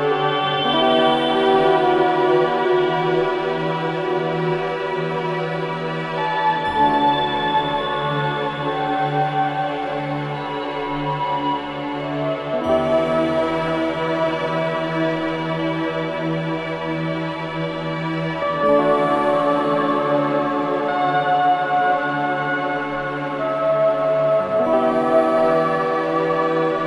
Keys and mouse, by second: 0.0 click, 0.7 click, 2.3 click, 3.9 click, 5.8 click, 6.9 click, 8.6 right click, 9.4 click, 10.7 click, 11.6 click, 12.6 click, 14.5 click, 16.3 click, 18.0 click, 19.3 3, 19.6 6, 20.0 Return, 22.6-23.5 typing, 23.5 Return, 25.0 click.